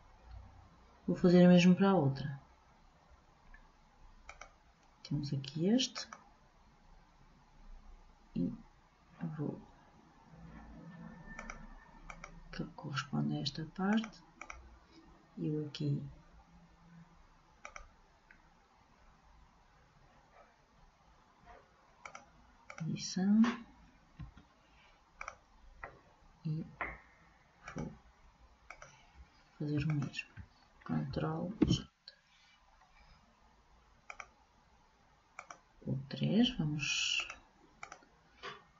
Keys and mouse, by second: 0.0 ctrl+j, 4.5-7.9 drag, 11.5-13.9 drag, 14.1-16.2 drag, 17.8-19.5 drag, 22.2-24.0 drag, 24.3 Delete, 27.8-31.8 drag, 31.8 ctrl+j, 34.2 click, 35.5-37.3 drag, 37.4-38.7 drag.